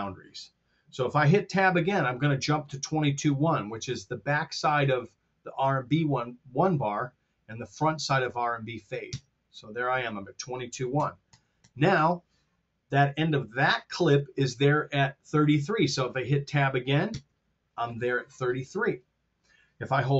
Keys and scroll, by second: 9.0 Tab, 10.8 r, 17.1 Tab.